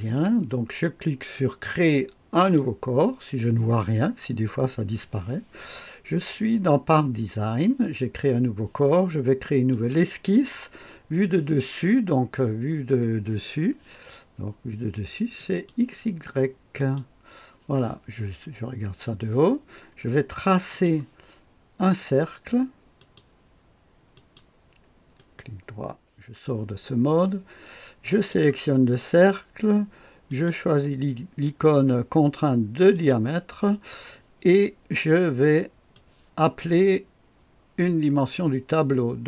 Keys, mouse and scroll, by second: 2.4 click, 9.7 click, 15.3 click, 16.7 click, 20.7 click, 23.0 click, 24.1 click, 25.2 right click, 28.0 click, 30.3 click, 32.9 click, 35.9-36.6 drag.